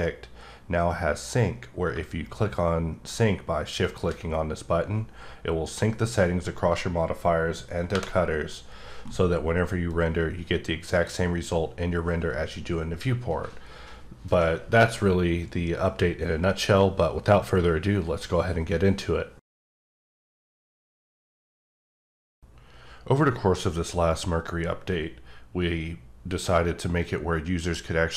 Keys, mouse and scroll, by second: 1.9 q, 3.8 shift+click, 7.9 F12, 9.9 click.